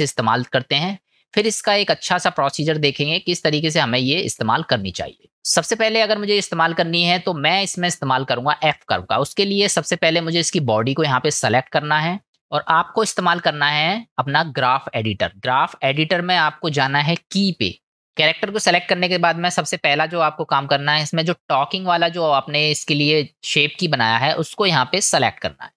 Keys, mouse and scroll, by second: 3.7-4.1 middle drag, 4.6-5.2 shift+middle drag, 5.3 middle click, 10.2 click, 17.5 click, 17.9-25.0 middle drag, 25.0 click.